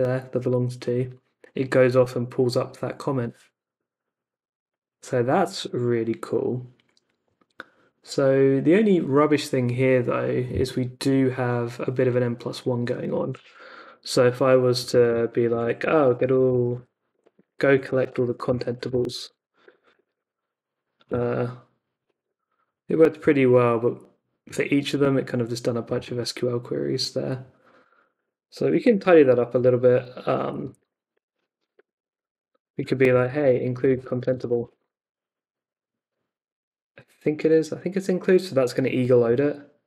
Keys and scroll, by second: 13.4 Up, 14.1 BackSpace, 15.5-20.6 typing, 21.0 Return, 28.8 super+k, 29.2 Up, 29.5 Left, 31.1-35.8 typing, 39.2 Return.